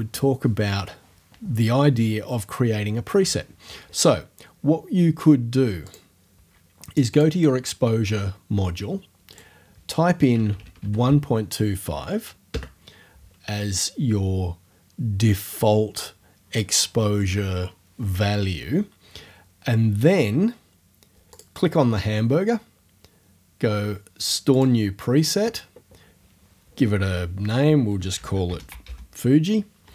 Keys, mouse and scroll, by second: 5.9 click, 7.1 click, 9.3 click, 10.1-11.3 typing, 12.5 Return, 21.3 click, 24.5 click, 28.0-29.3 typing.